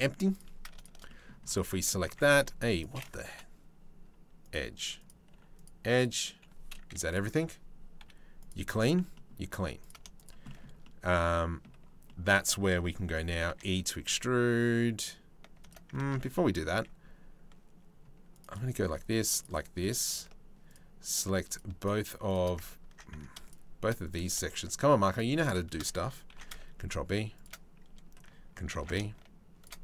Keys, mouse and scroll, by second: 0.6 middle click, 1.3 right click, 1.4 click, 1.6 click, 2.0 2, 2.4 click, 2.8 Delete, 4.6 click, 4.9 Delete, 5.5 click, 6.7 a, 7.6 m, 9.2 3, 9.4 click, 10.0 shift+middle click, 10.4 middle click, 11.6 click, 13.1 e, 15.6 ctrl+z, 15.9 click, 16.3 ctrl+r, 18.4 ctrl+r, 20.3 alt+shift+click, 23.0 shift+click, 24.7 shift+click, 25.9 ctrl+b, 28.3 ctrl+b.